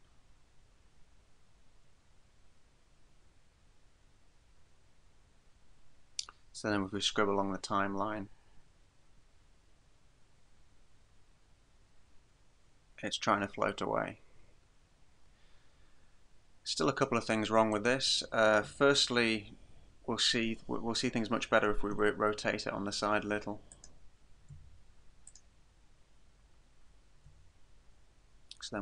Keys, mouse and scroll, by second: 7.1 click, 17.8 right click, 22.0 r, 23.9 click, 24.5 g, 25.4 click, 25.6-26.0 scroll up 1, 27.3 g.